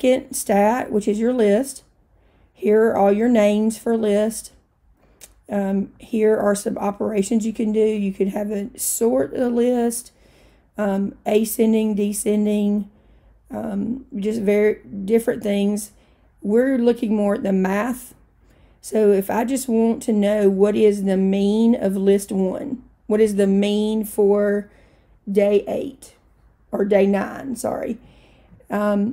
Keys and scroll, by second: 5.9 Right, 17.3 Right.